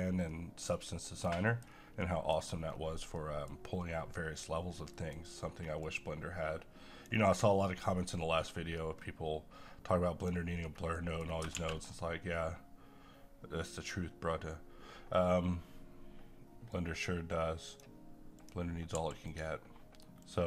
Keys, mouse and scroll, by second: 0.3 middle click, 0.9-1.3 scroll down 1, 1.3 middle click, 1.7 scroll down 1, 2.0 middle click, 2.7-3.1 scroll up 1, 3.1 middle click, 4.2-4.8 scroll up 1, 4.8 middle click, 5.8-10.6 drag, 10.6 scroll down 1, 10.9 middle click, 11.5 shift+a, 16.7-18.4 drag, 18.9 g, 19.3-20.4 drag.